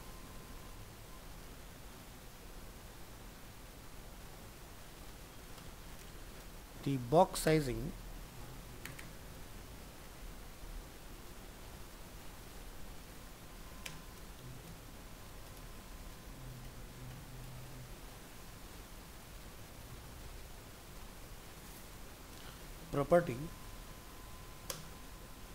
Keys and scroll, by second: 12.3 ctrl+Left, 14.4 ctrl+shift+Right.